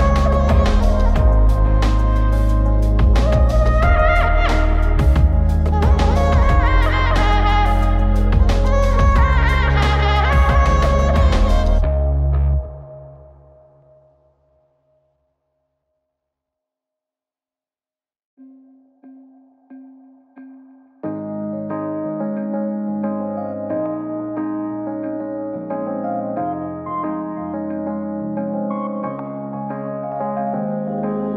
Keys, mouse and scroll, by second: 4.0-7.8 drag, 9.5 click, 10.5 click, 11.8 click, 12.5-14.7 middle drag, 14.8 Tab, 16.8 Tab, 20.2 click, 21.4 click, 21.9 middle click, 22.3 click, 24.4 Tab, 27.0 click, 27.5 middle click, 30.5 Tab.